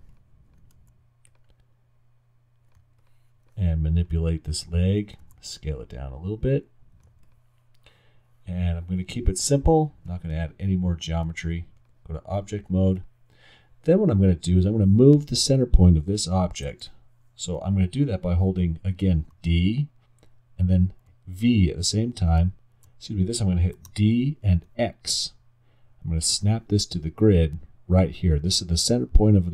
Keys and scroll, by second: 0.8 alt+w, 5.2 alt+r, 19.3 d, 20.7 d, 21.1 v, 23.9 d, 24.7 x.